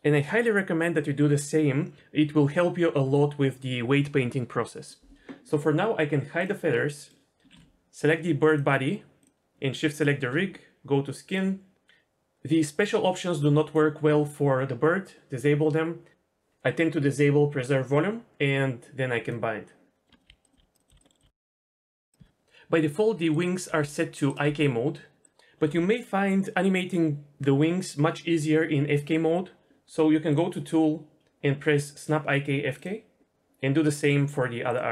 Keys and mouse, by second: 6.4 click, 6.9 middle drag, 7.4 ctrl+z, 9.2 click, 11.2 click, 12.5 click, 17.1 click, 19.2 click, 19.9-20.3 middle drag, 20.3 Tab, 20.3-21.8 typing, 21.0 middle click, 21.4 middle click, 22.4-22.8 middle drag, 23.3 right click, 23.6 r, 24.2 right click, 24.4 g, 30.3 click, 32.8 click.